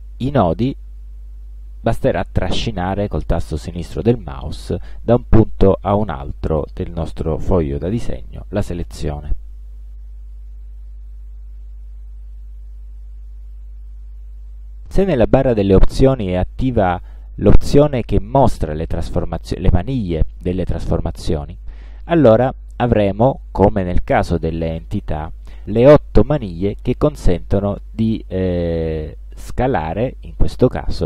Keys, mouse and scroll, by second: 0.4-3.5 drag, 9.8-11.4 alt+drag, 13.5 shift+click, 22.8 shift+click, 26.3-29.0 drag, 30.7-31.0 drag.